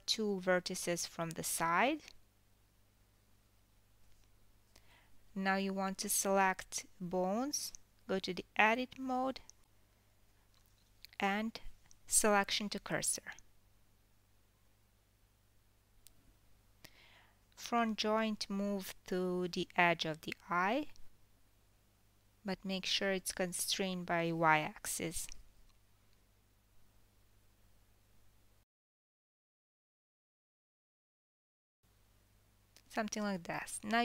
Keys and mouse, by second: 1.8 Tab, 2.5 click, 3.1 Tab, 3.7 click, 6.1 shift+s, 9.7 click, 10.6 KP_7, 10.8-16.3 middle drag, 14.1 KP_7, 17.4 click, 19.6 g, 23.5 middle click, 23.8 click, 24.0-25.8 middle drag, 25.8 click, 26.0-30.1 middle drag, 28.1 g, 32.8 ctrl+s, 33.9 ctrl+z, 33.9-34.0 middle drag.